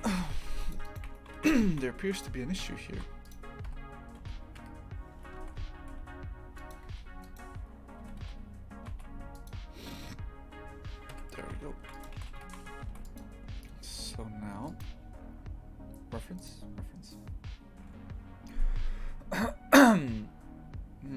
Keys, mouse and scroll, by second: 0.8 right click, 1.0 Tab, 1.3 shift+f, 2.6 KP_Divide, 2.9 shift+f, 3.6 KP_Divide, 4.1 Tab, 4.6 KP_Divide, 5.1 Tab, 5.4 shift+f, 7.2 right click, 8.0 g, 10.0 Tab, 11.1 KP_Divide, 11.4 shift+f.